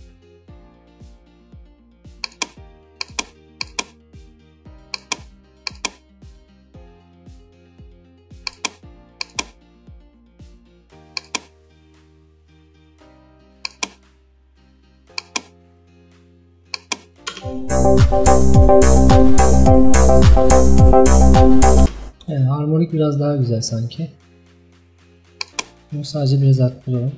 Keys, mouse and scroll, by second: 17.4 space, 21.9 space.